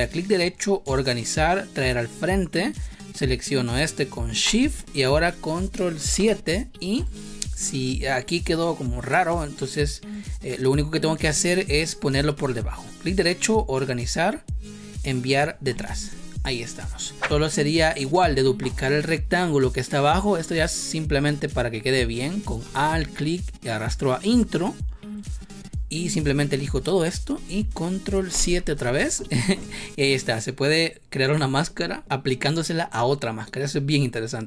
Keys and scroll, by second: 6.0 ctrl+7, 28.2 ctrl+7.